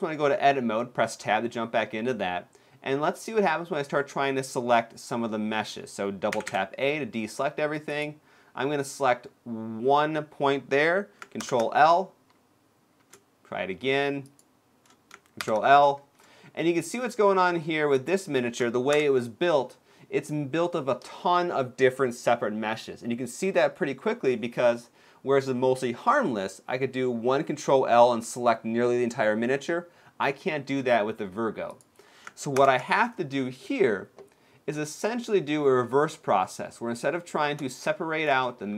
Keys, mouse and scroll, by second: 6.1 a, 6.2 a, 7.6 click, 11.2 ctrl+l, 13.9 shift+click, 15.1 shift+click, 15.2 ctrl+l, 17.6 ctrl+click, 18.7 ctrl+click, 18.7 ctrl+l, 31.4 click, 32.4 ctrl+l, 37.5 shift+middle click.